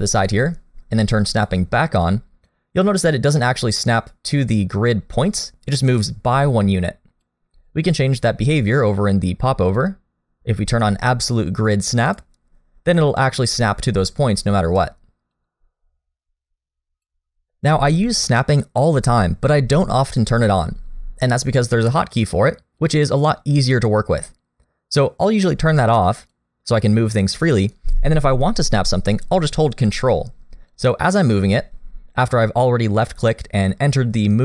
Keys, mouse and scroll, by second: 1.4 click, 2.4 click, 3.4 middle click, 4.7 click, 9.7 click, 13.0 click, 14.4 click, 15.3 click, 18.2 click, 22.8 click, 30.7 click.